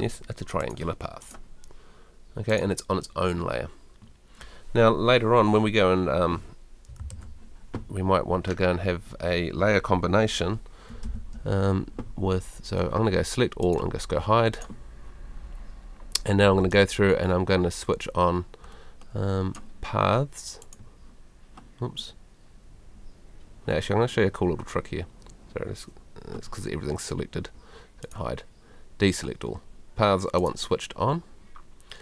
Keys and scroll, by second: 11.0 super+l.